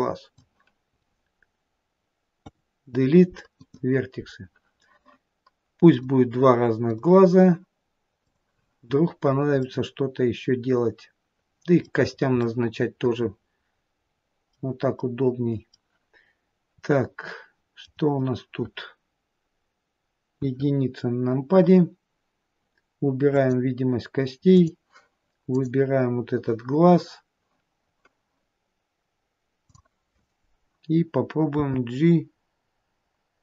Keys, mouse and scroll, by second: 2.7 Delete, 6.3 click, 8.6 click, 9.4-9.9 scroll down 1, 9.9 middle click, 12.4-12.8 scroll up 2, 12.8 middle click, 15.3 middle click, 15.3-15.8 scroll up 1, 17.2 middle click, 20.6 KP_1, 23.6 click, 24.8 click, 30.0 click, 31.8 g.